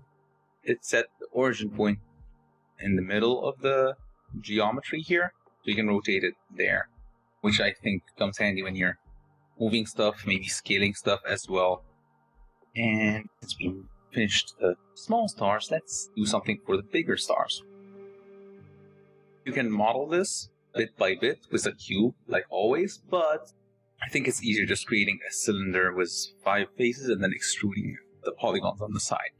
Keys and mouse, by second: 5.4 r, 10.3 s, 16.3 shift+click, 16.4 shift+middle drag.